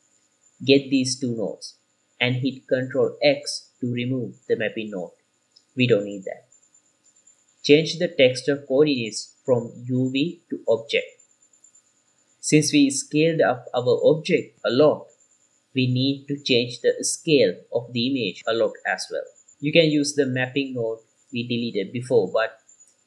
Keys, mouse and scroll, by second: 0.2 middle click, 1.1 click, 1.9 click, 4.0 click, 5.2 ctrl+x, 6.3 click, 7.4 click, 7.6-10.2 drag, 11.0-12.5 middle drag, 11.0-12.5 scroll up 1, 13.7 click, 16.8 shift+a.